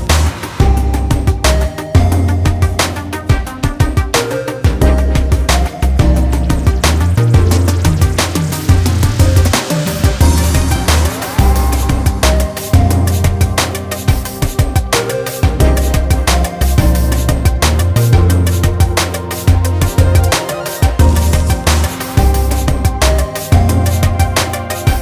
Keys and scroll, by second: 13.2 |, 14.5 |.